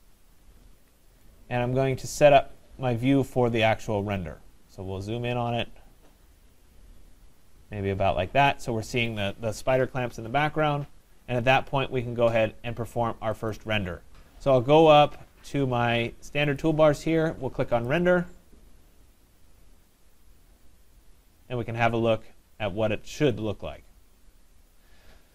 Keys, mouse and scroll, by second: 0.8 Escape, 2.1 right click, 2.5-3.5 middle click, 2.6 middle click, 2.7 middle click, 3.3 middle click, 3.3 middle click, 3.4 middle click, 4.0 middle click, 4.1 scroll, 4.8 right click, 5.2-5.6 scroll, 6.3-6.7 scroll, 6.7 middle click, 7.0 middle click, 13.5 click, 15.0 click, 16.6 click, 17.9 click.